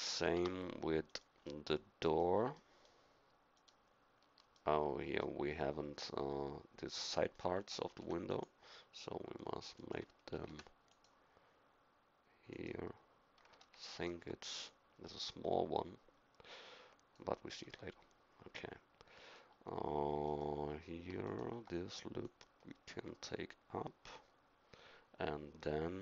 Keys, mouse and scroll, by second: 0.4 Tab, 3.6-6.1 middle drag, 7.9 ctrl+r, 10.4 ctrl+r, 17.9 middle click.